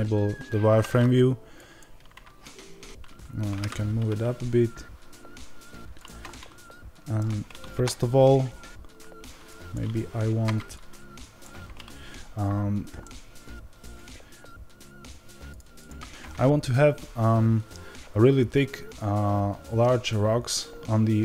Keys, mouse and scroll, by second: 1.4-5.9 drag, 6.2-9.3 middle drag, 7.6 KP_7, 9.3-12.9 drag, 12.9-21.2 middle drag, 15.4 ctrl+alt+shift+KP_Divide.